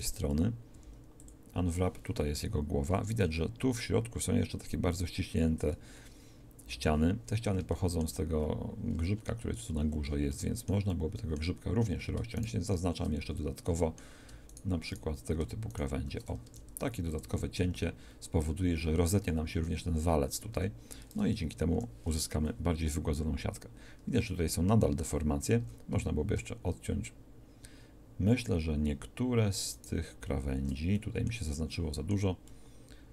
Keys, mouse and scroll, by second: 0.7 u, 10.0 shift+a, 12.3 click, 13.2 a, 16.4 ctrl+e, 17.6 a, 20.5 a, 21.7 u, 23.2 middle click, 23.4 middle click, 23.7-25.3 middle drag, 25.6 a.